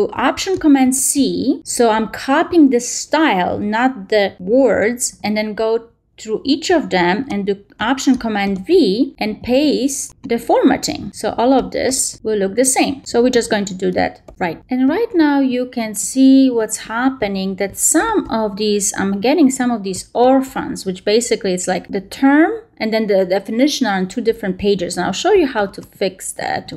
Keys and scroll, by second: 0.7 alt+shift+super+c, 5.5 alt+shift+super+v, 6.2 alt+shift+super+v, 6.9 alt+shift+super+v, 7.5 alt+shift+super+v, 8.0 alt+shift+super+v, 8.7 alt+shift+super+v, 9.2 alt+shift+super+v, 9.7 alt+shift+super+v, 10.3 alt+shift+super+v, 11.0 alt+shift+super+v, 11.8 alt+shift+super+v, 12.4 alt+shift+super+v, 13.0 alt+shift+super+v, 13.5 alt+shift+super+v, 14.1 alt+shift+super+v.